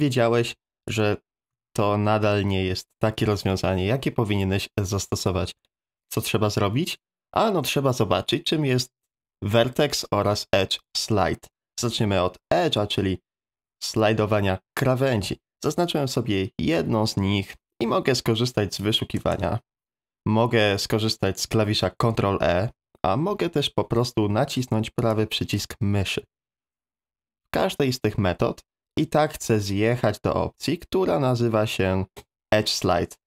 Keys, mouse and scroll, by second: 0.4 ctrl+z, 0.9 ctrl+z, 16.1 middle click, 19.3 space, 21.9 ctrl+e, 23.8 Escape, 25.1-33.2 right drag.